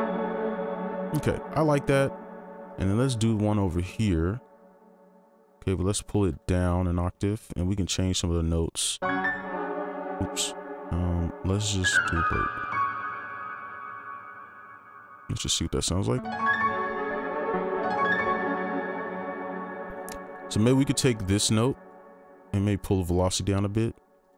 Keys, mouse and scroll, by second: 0.8 ctrl+click, 2.7 shift+click, 6.3 ctrl+Down, 9.6 space, 14.7 alt+click, 17.6 space, 19.5 space, 21.7 ctrl+click.